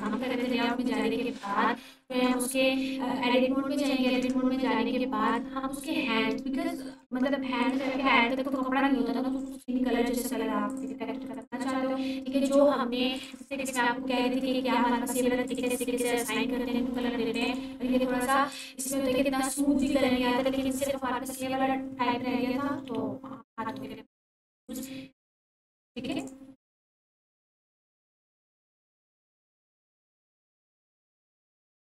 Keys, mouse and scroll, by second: 0.4 Tab, 1.0-2.5 drag, 4.1 Tab, 5.3-7.2 shift+drag, 15.5-20.1 drag, 28.2 Tab, 28.6-30.5 scroll down 1, 31.1 ctrl+s.